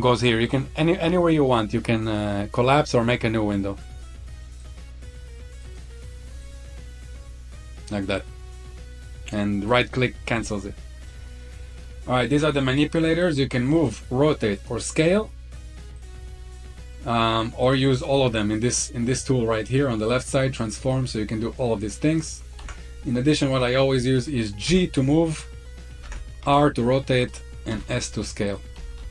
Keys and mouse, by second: 0.8-2.1 drag, 3.0 click, 4.6-5.7 drag, 6.4-9.7 drag, 11.0-11.7 middle drag, 14.4 click, 15.8 click, 17.5 click, 22.5 ctrl+z, 23.4-24.5 drag, 24.5 g, 25.6 click, 25.9 ctrl+z, 26.3 r, 28.3 drag, 28.3 s, 28.6 ctrl+z, 28.8 ctrl+z.